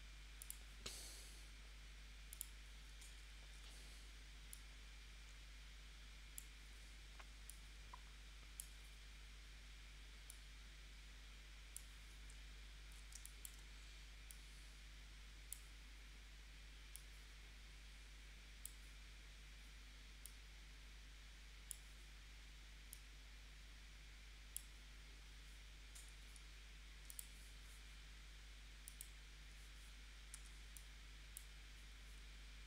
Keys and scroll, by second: 3.3 shift+c, 13.1 space, 26.0 a, 30.4 a.